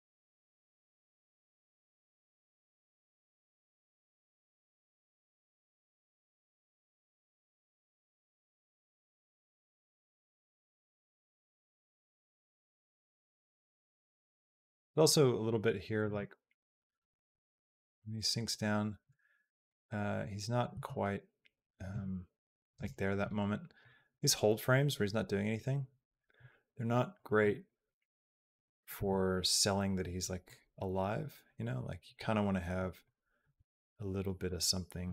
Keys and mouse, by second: 11.9 space, 12.7-13.9 drag, 14.1 middle click, 14.8-15.8 drag, 15.9 space, 18.9 space, 19.5-20.5 drag, 20.5 space, 22.6 space, 23.6-26.0 drag, 26.9 click, 27.4 click, 28.3 click, 28.8 a, 30.3-31.9 drag, 32.8 click, 33.3 g.